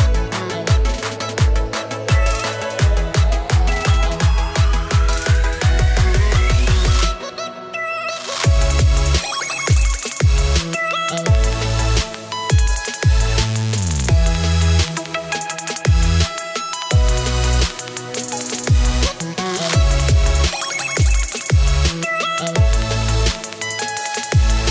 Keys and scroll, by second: 0.0-0.7 typing, 9.4 space, 11.2 space, 11.9 space, 13.9 space, 14.7 space, 16.0-18.4 typing, 20.2 space, 22.1 space, 23.7 space.